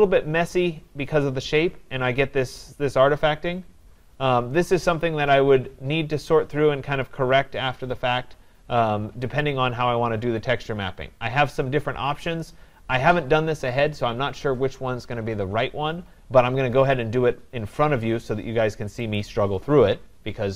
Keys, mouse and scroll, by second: 5.6 scroll, 19.2 click.